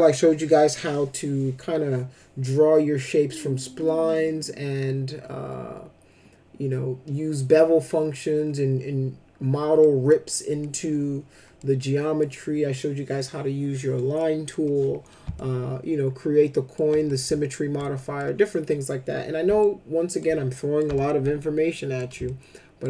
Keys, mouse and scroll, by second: 9.8 middle click, 10.6 middle click, 11.6 middle click, 14.1 middle click, 15.3-16.7 alt+middle drag, 17.1 alt+middle click, 17.9 middle click, 19.6 alt+middle click, 20.5 middle click, 21.0 alt+middle click, 22.2 ctrl+alt+middle click.